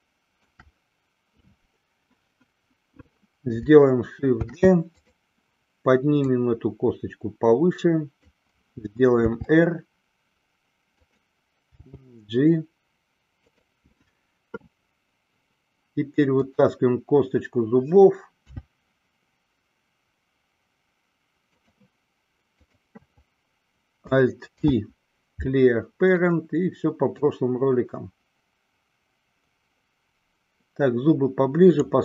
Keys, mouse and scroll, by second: 4.5 shift+d, 5.2 click, 6.4-8.4 drag, 9.6 r, 11.2 click, 12.2 g, 13.6 click, 16.5 click, 18.6 e, 21.8 click, 22.7 click, 24.7 alt+p, 27.6-32.0 drag.